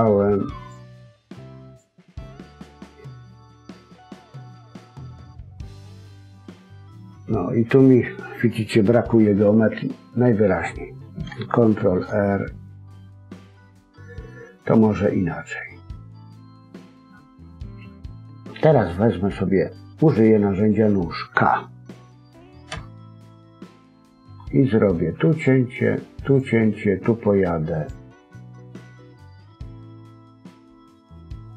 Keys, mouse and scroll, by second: 1.6 click, 2.4-2.8 scroll up 1, 4.7 scroll up 2, 11.7 ctrl+r.